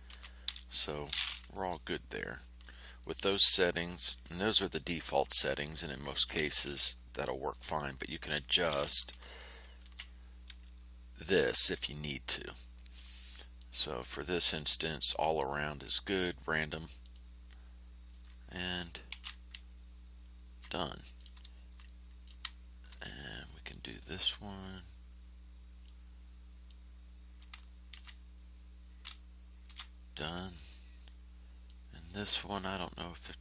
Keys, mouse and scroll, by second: 0.0 ctrl+z, 9.8 shift+0, 13.5 click, 17.0 click, 19.1 ctrl+shift+a, 20.6 ctrl+click, 23.6-26.0 drag, 26.6 click, 27.9 ctrl+f, 29.6 ctrl+shift+a, 30.2 ctrl+shift+click, 30.4 click, 31.6-33.4 drag.